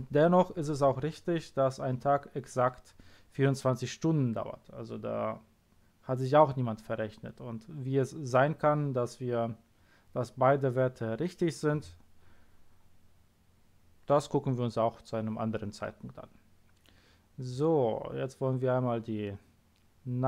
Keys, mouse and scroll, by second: 16.8-17.4 scroll down 2, 17.4 scroll down 1, 18.0-18.6 scroll down 2, 18.6-19.0 scroll down 1, 20.1 middle click.